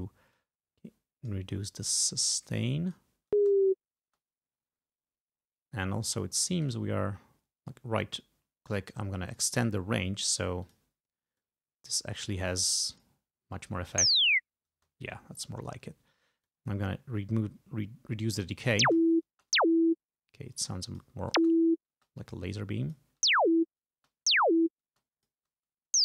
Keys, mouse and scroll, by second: 0.4-1.5 drag, 2.5 click, 3.4 space, 4.1 space, 6.6 right click, 9.4 click, 10.7 click, 11.5-13.3 drag, 14.1 space, 14.8 space, 16.5-18.7 drag, 18.9 space, 20.7 click, 21.4 space, 22.6 click, 23.3 space, 24.1 space, 25.1 click.